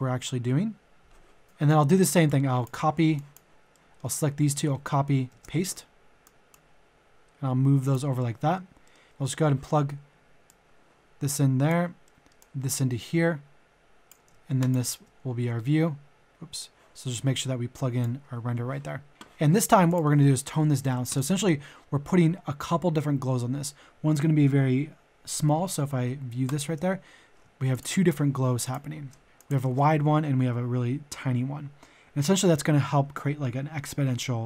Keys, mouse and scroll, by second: 1.4-2.9 drag, 3.1 shift+click, 3.7 shift+middle click, 4.7 ctrl+c, 5.2 ctrl+v, 6.2-8.0 drag, 8.1 middle click, 10.4-12.0 drag, 12.0 middle click, 12.3-14.3 drag, 14.6-18.8 shift+drag, 20.7 KP_1, 21.6 KP_0, 26.4 ctrl+shift+click, 27.7 ctrl+click, 32.8 ctrl+shift+click.